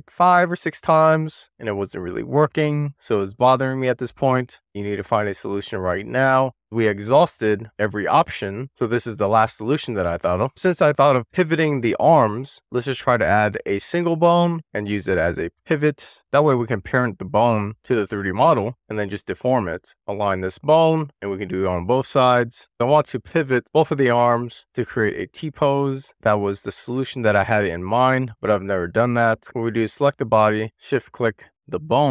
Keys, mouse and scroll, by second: 10.5 middle click, 10.7 shift+right click, 11.3-12.1 middle drag, 12.7 shift+a, 15.7-17.6 middle drag, 18.4 middle click, 19.4 middle click, 19.8 click, 20.1 middle click, 20.2 super+z, 20.6 click, 20.7 shift+middle click, 21.2 click, 22.3 shift+d, 22.5 right click, 22.9 click, 23.9 middle click, 25.1 click, 25.6 click, 25.9 click, 26.4 click, 27.7 click, 28.4 middle click, 29.3 click, 30.3 shift+click.